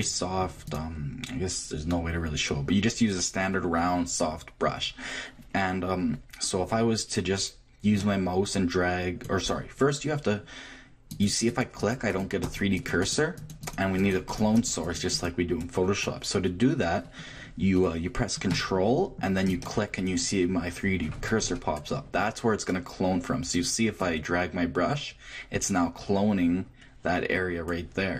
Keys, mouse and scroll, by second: 5.6 middle click, 8.0-9.9 drag, 11.1-17.1 drag, 18.3 click, 19.5-21.4 drag, 24.0-25.9 drag.